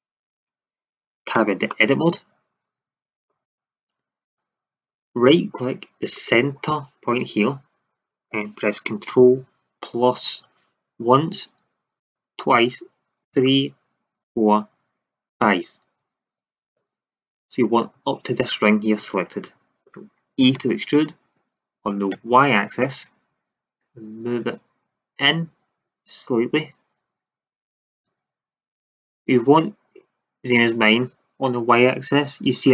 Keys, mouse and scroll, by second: 1.3 Tab, 1.6-3.9 middle drag, 6.1-7.3 right drag, 10.3 ctrl+KP_Add, 11.9 ctrl+KP_Add, 13.2 ctrl+KP_Add, 14.2 ctrl+KP_Add, 15.2 ctrl+KP_Add, 20.5 e.